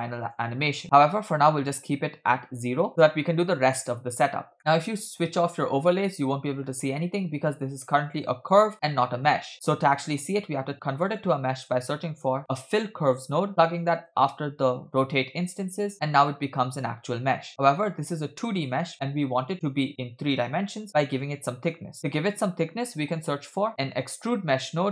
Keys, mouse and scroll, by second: 0.8-2.1 shift+drag, 4.2-4.6 scroll down 2, 4.7-5.1 middle drag, 6.0 click, 8.1 click, 9.5 middle click, 9.5 scroll up 2, 9.7-10.3 drag, 10.9 shift+a, 13.1 l, 15.9 middle click, 17.5-18.8 middle drag, 18.9 scroll up 3, 20.9 middle click, 21.2 click, 22.0 shift+a.